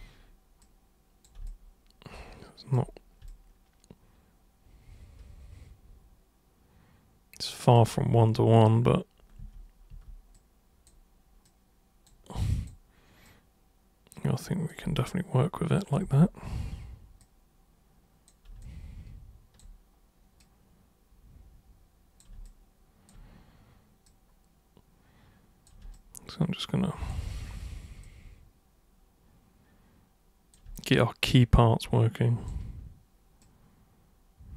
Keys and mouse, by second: 0.6 super+click, 1.4-2.7 alt+super+drag, 3.2-7.7 alt+super+drag, 7.9 super+e, 9.4 super+w, 9.9 super+e, 10.3 super+click, 11.4 super+click, 12.4 super+click, 13.2 super+click, 15.0-15.9 alt+super+drag, 16.0 super+w, 17.2 super+click, 18.6-19.6 alt+super+drag, 20.4-22.2 super+drag, 22.5-23.0 alt+super+drag, 24.0 super+click, 25.9-27.0 alt+super+drag, 27.2 super+c, 28.0 super+click, 30.8-32.4 alt+super+drag, 33.4 super+click.